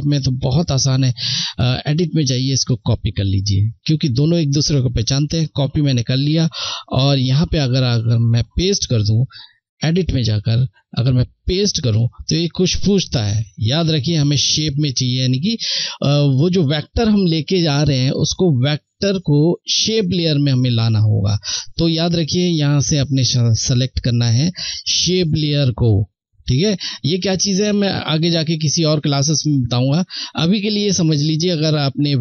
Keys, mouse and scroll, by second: 0.5 click, 5.6 click, 8.9 click, 20.7 click.